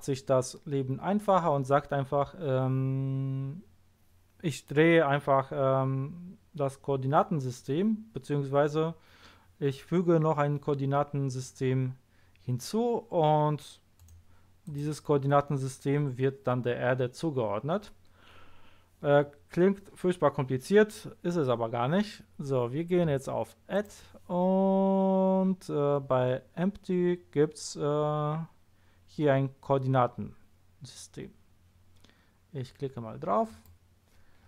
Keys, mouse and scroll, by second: 14.0 right click, 14.6 click, 23.7 click, 33.4 click.